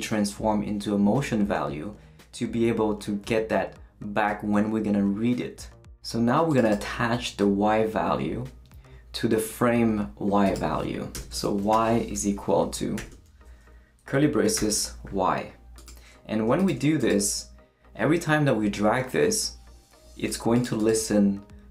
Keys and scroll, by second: 11.1 Return, 11.7 y, 12.1 =, 12.7 shift+=, 13.0 shift+[, 14.5 y.